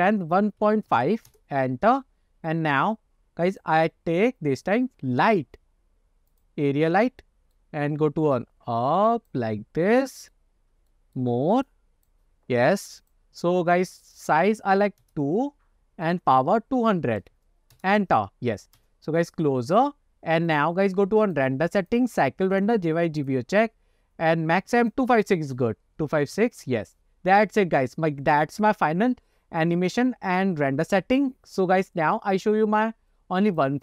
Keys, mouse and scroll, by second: 1.9 middle click, 2.3 scroll down 1, 2.6-2.9 middle drag, 3.6 click, 3.9-6.5 drag, 6.9 middle click, 7.2 click, 8.4-9.4 drag, 9.7 scroll down 2, 10.1-10.5 middle drag, 10.6-11.0 scroll down 1, 11.0 middle click, 11.7 click, 13.1 click, 14.2 click, 16.2-17.9 drag, 17.4 KP_0, 18.9 KP_0, 20.6 click, 21.3-22.1 drag, 22.6-23.5 drag, 24.9-26.7 drag, 32.4-33.8 drag.